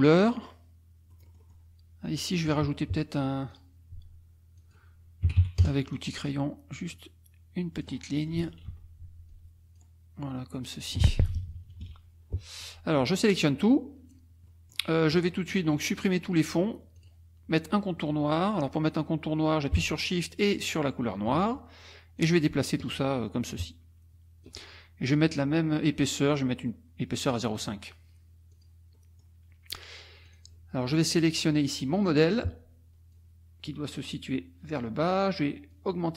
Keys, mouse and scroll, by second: 1.1 click, 3.5 click, 4.6 click, 5.3 KP_2, 5.4 KP_5, 5.6 KP_Enter, 6.9 click, 8.2-8.7 scroll up 1, 8.7 F2, 9.3 click, 10.6 click, 11.1 F1, 11.2 -, 12.3 middle click, 13.1-14.3 drag, 14.5 middle click, 17.0 click, 20.6 shift+click, 22.2-24.6 drag, 26.0 right click, 27.3 click, 28.5 click, 29.0 middle click, 30.3 click, 33.1 click, 34.7 click, 35.7 click.